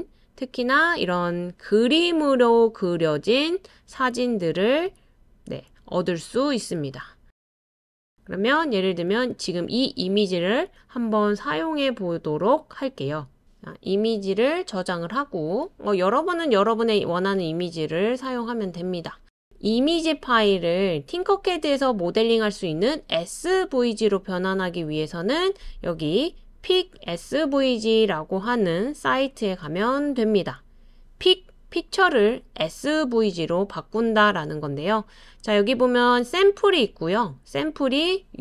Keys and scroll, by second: 1.9-2.6 typing, 4.9-5.6 typing, 6.8-7.6 typing, 15.7-19.3 typing, 29.6 super+space.